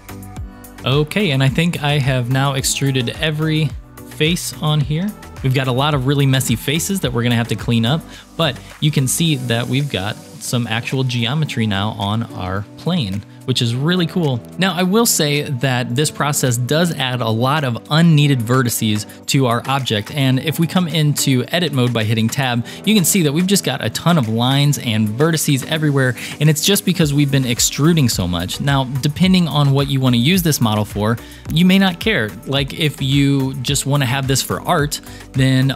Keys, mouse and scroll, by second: 0.0 shift+middle click, 0.3 shift+click, 0.5 middle click, 0.5 e, 0.7-1.8 middle drag, 3.0-5.0 shift+middle drag, 5.3 middle click, 6.4-7.0 shift+middle drag, 7.7 scroll up 1, 8.3 scroll down 1, 8.7 Tab, 9.2 Tab, 9.6-10.2 shift+middle drag, 10.4-12.2 middle drag, 12.5-13.0 shift+middle drag, 13.2 scroll down 1, 14.0 scroll down 2, 14.5 click, 21.1 click, 21.6 Tab, 24.6 1.